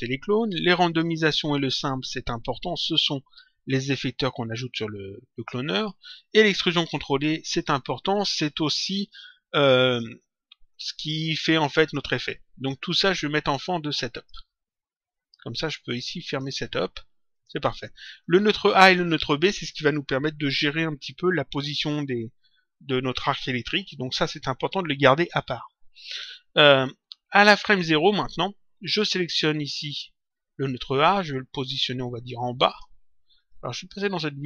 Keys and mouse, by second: 0.8 ctrl+click, 1.9 ctrl+click, 7.0 ctrl+click, 13.0 click, 16.2 click, 17.5 click, 29.8 click, 31.3 click, 33.4 middle click.